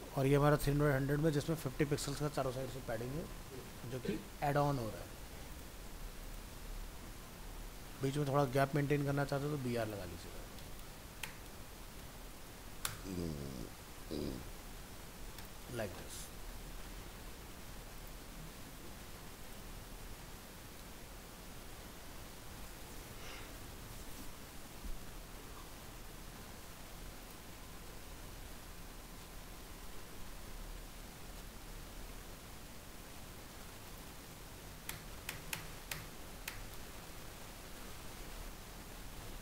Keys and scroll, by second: 13.2 ctrl+s, 13.8 alt+Tab, 17.5 alt+Tab, 18.5 ctrl+s, 34.9 BackSpace.